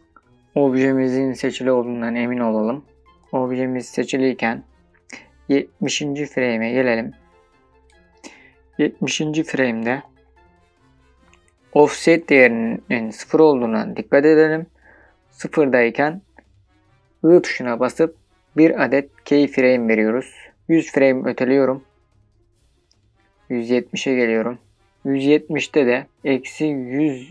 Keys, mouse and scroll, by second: 3.2 click, 3.2 n, 6.0-9.0 drag, 21.1-27.3 drag, 26.0 KP_1, 26.7 KP_0.